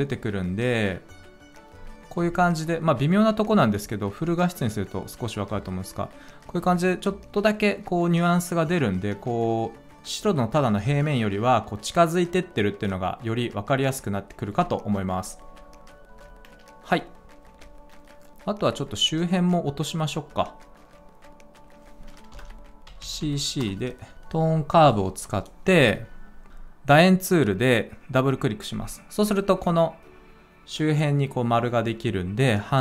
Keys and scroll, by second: 22.3 Return, 22.9-24.6 typing, 23.5 Return.